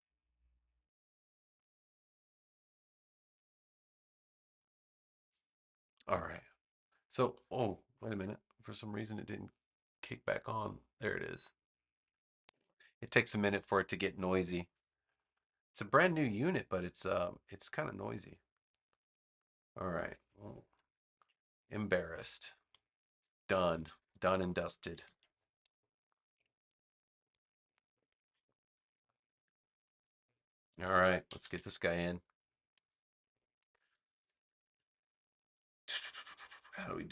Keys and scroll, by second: 21.1 super+g, 23.6 super+-, 24.9 super+s, 25.7 space, 31.2 super+=, 32.3 space.